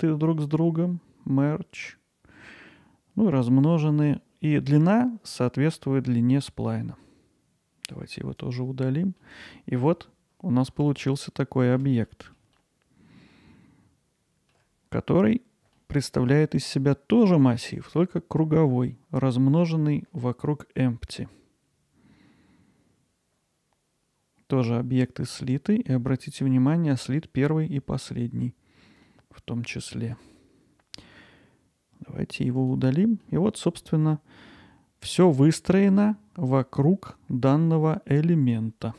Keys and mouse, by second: 9.2-9.8 middle drag, 11.0-11.8 ctrl+alt+middle drag, 12.1 middle drag, 12.6-14.6 alt+middle drag, 15.8-17.7 alt+middle drag, 29.1-30.1 alt+middle drag, 32.6 click, 33.2-38.5 alt+middle drag.